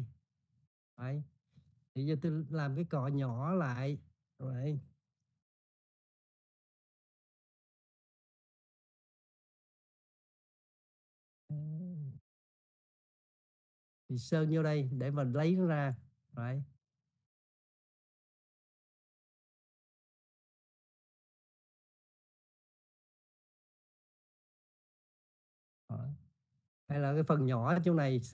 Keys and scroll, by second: 5.9 [, 7.1-7.7 typing.